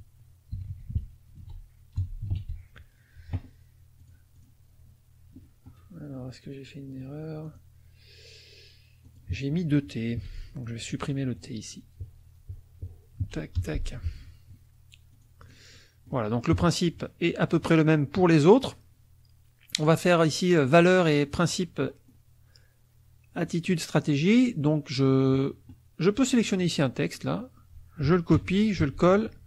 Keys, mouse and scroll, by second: 0.0-3.2 typing, 4.0 click, 7.5 click, 9.1 click, 10.1 t, 11.4 click, 13.2 Down, 13.6 BackSpace, 15.1 click, 15.8-17.1 drag, 16.5 KP_Subtract, 17.3 middle click, 21.8 middle click, 23.4 middle click, 26.5 click, 27.0 click, 28.4 ctrl+c, 28.8 ctrl+v.